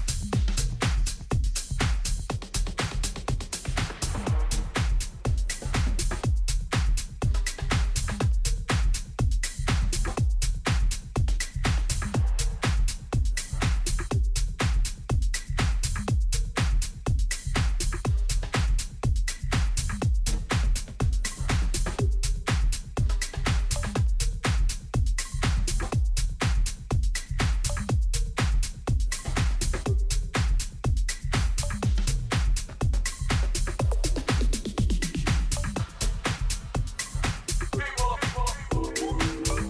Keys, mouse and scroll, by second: 0.2 g, 22.3-27.0 middle drag, 24.2 z.